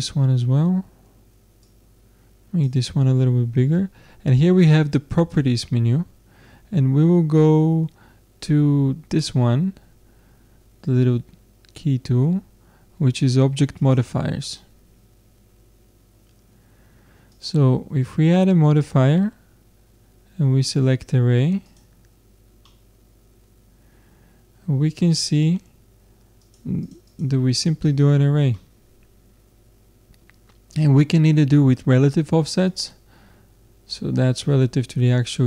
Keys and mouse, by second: 1.6-6.1 drag, 13.8-16.2 drag, 17.3-19.3 drag, 22.6-23.9 middle drag, 26.4-28.6 drag, 28.6-30.0 middle drag, 32.7-34.5 drag.